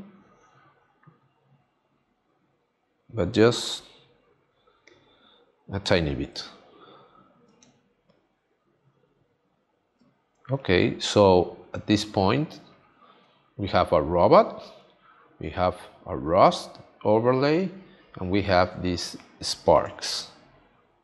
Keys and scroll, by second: 7.5 space, 20.0 space.